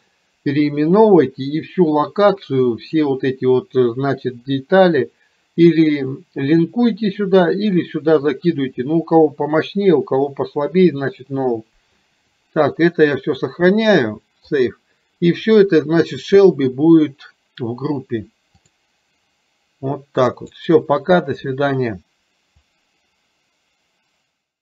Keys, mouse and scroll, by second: 13.5-14.9 drag, 18.8 click.